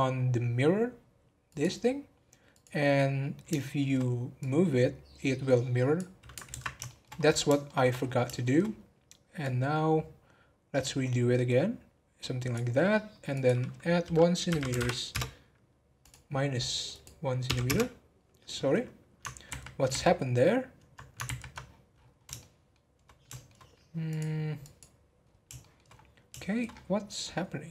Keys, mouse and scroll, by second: 1.4 click, 2.5-3.6 drag, 3.6 shift+middle click, 4.3 click, 6.5 ctrl+z, 6.8 shift+middle click, 7.1 scroll up 1, 7.6 shift+middle click, 8.0 scroll up 1, 8.3 shift+middle click, 8.6-9.4 scroll up 2, 9.4 click, 13.3-19.0 drag, 19.4 ctrl+z, 19.9 ctrl+z, 21.6-22.1 scroll down 13, 22.4-24.1 shift+middle drag, 24.1 click, 25.2 scroll up 1, 25.6 shift+middle click, 25.9 scroll up 2, 26.4 shift+middle click, 26.7 scroll up 1.